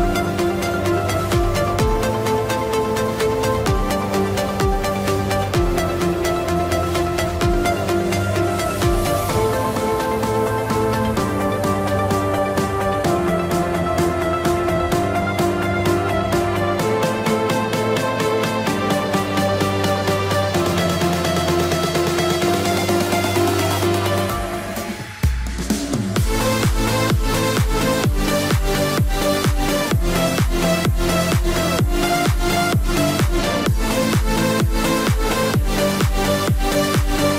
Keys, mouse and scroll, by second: 0.4 middle click, 0.8 click, 1.2 middle click, 2.4 scroll down 1, 2.5 middle click, 3.5 click, 5.2 middle click, 6.0 click, 10.3 F2, 10.6 click, 12.5 middle click, 13.5-13.9 scroll up 1, 13.9 middle click, 14.8 click, 19.6 click, 24.4 click, 25.3 e, 26.0 click, 26.7 middle click, 27.4 scroll down 1, 27.6 middle click, 31.2 click, 35.2 right click, 36.4 click.